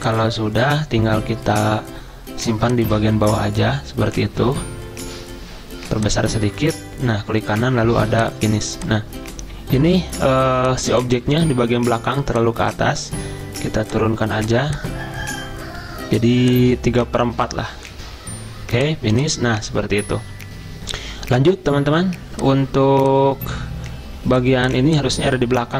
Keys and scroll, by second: 10.3 z.